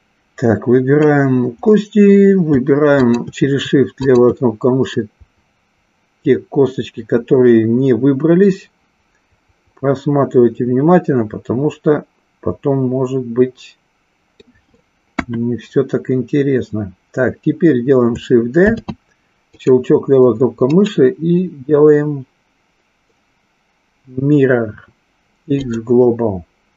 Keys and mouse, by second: 3.0 shift+click, 4.0 shift+click, 4.9-14.5 middle drag, 15.1 KP_1, 18.6 shift+d, 19.6 click, 20.7-25.7 right drag.